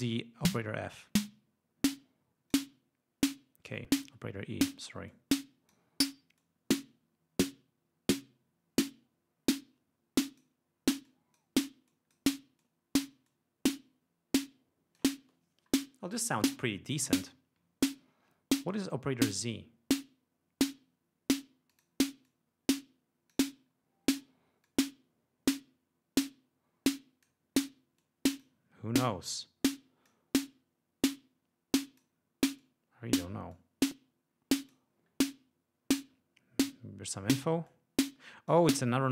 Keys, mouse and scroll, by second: 0.2-2.8 drag, 5.2-6.0 drag, 6.5-10.7 drag, 11.1-11.6 drag, 12.0-12.4 drag, 12.7-13.3 drag, 14.5 click, 20.1-21.6 drag, 21.8 click, 22.3-23.6 drag, 24.7-27.5 drag, 28.1 click, 29.4-30.4 drag, 30.5-32.3 drag, 32.7-33.5 drag, 33.6-35.0 drag, 37.8-38.8 drag.